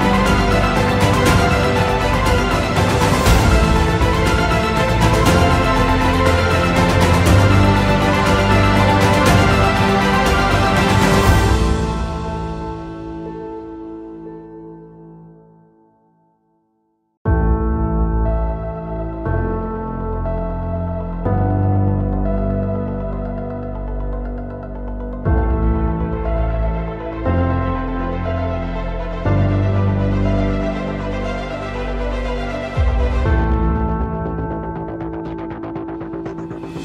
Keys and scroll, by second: 3.5 Escape, 3.8 F2, 9.1 Delete, 9.8 ctrl+z, 11.6 Delete, 12.3 ctrl+z, 15.9 Delete, 16.6 ctrl+z, 26.0 Escape, 28.2 alt+c, 32.8 F4, 33.6 Escape.